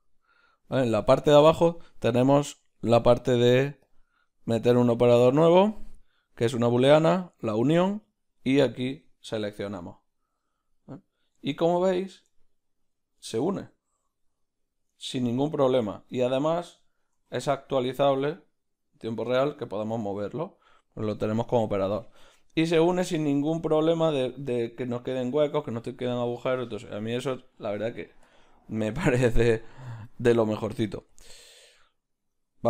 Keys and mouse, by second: 11.6-16.1 middle drag, 16.1-17.2 right drag, 17.2 g, 20.3-23.6 right drag, 23.6-31.2 middle drag, 23.6 z, 28.3 z, 31.2-32.6 drag.